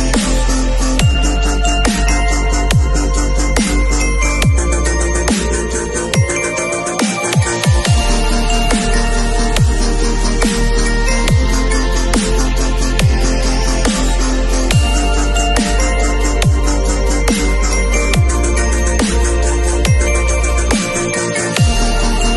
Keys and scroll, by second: 0.1 b, 1.9 0, 2.5 [, 9.2 [, 15.3 v, 18.6 shift+super+i, 20.5 shift+F6.